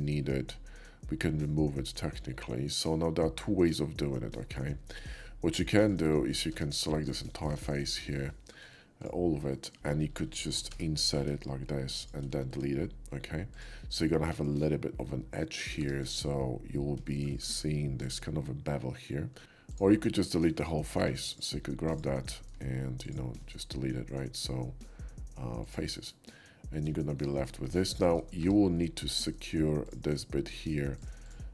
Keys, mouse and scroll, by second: 5.2 /, 5.6-5.9 middle drag, 6.5 Tab, 6.8 click, 7.2 shift+middle click, 7.7 shift+middle click, 9.0 ctrl+click, 9.5 middle click, 10.7 i, 12.0 shift+click, 12.5 x, 13.5 click, 14.1 middle click, 15.5 middle click, 15.8 Tab, 17.1 shift+middle drag, 18.0-19.3 shift+drag, 19.6 click, 19.6 x, 20.2 /, 20.7 middle click, 21.0 Tab, 21.3 click, 22.3 middle click, 23.0 ctrl+click, 23.5 x, 25.6 click, 26.1 middle click, 27.0 shift+middle click, 27.8 shift+middle click, 28.4 Tab, 28.7 middle click, 29.8 click, 30.1 middle click, 30.9 shift+click, 31.3 shift+click.